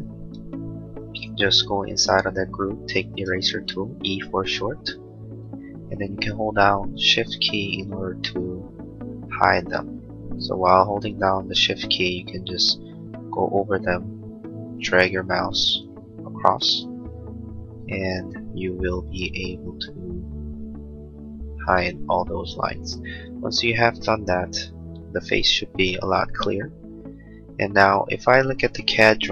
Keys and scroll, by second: 3.2 e, 22.9 space, 23.2 Escape.